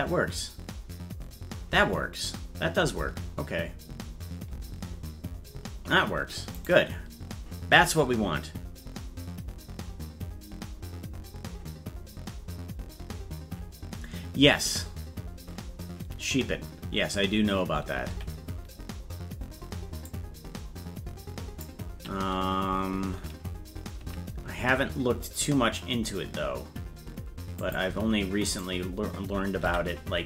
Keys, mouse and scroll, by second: 6.6 right click, 28.5 right click, 29.6 b.